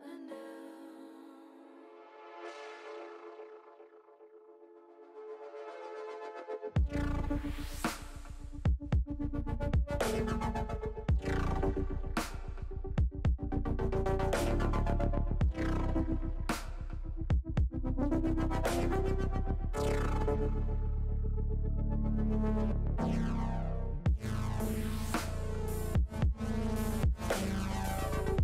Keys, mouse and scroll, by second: 0.1 shift+middle click, 0.5 shift+middle click, 0.9 shift+middle click, 1.3 shift+middle click, 2.0 middle click, 2.9 KP_0, 13.1 click, 17.7 click, 23.8 click.